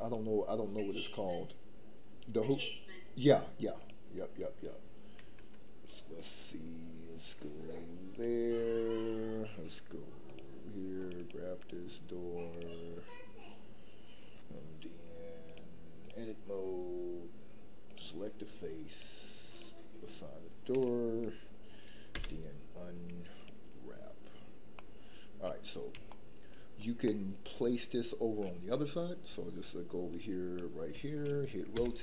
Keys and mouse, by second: 0.2-3.9 drag, 15.6 click, 17.8 click, 22.1 u, 24.7 middle click, 26.3 shift+middle click, 27.0-28.4 middle drag, 30.3 drag, 31.7 r.